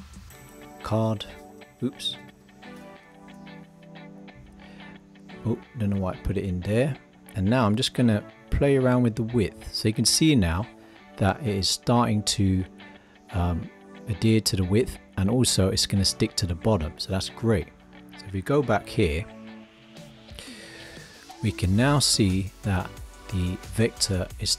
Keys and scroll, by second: 1.8 super+a.